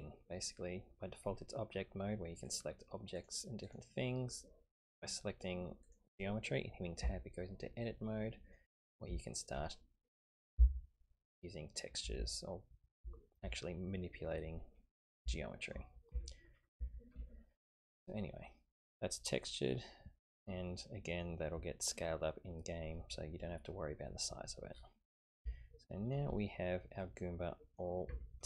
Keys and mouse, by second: 2.4 click, 3.2 click, 3.7 click, 5.8 click, 7.0 Tab, 8.2 middle click, 9.2 shift+middle click, 10.3 click, 10.6 g, 14.1-15.1 middle drag, 15.3 shift+middle click, 16.1 Tab, 16.8 Tab, 17.3 shift+middle click, 18.3 middle click, 20.7 middle click, 25.5 shift+middle click, 26.4-27.9 middle drag, 28.1 Tab.